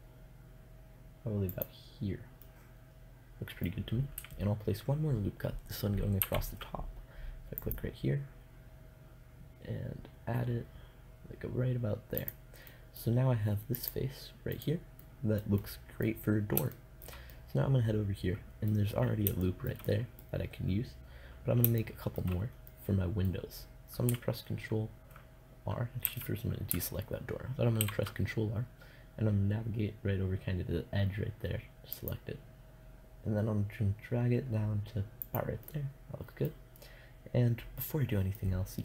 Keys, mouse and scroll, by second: 1.1 click, 1.9 middle click, 2.8-5.7 drag, 5.7 ctrl+r, 11.7-14.0 drag, 14.0-15.6 middle drag, 17.1 middle click, 17.9 middle click, 19.1-21.4 middle drag, 22.2-24.0 middle drag, 25.5 a, 27.2 ctrl+r, 35.1-36.7 middle drag, 38.5 Tab.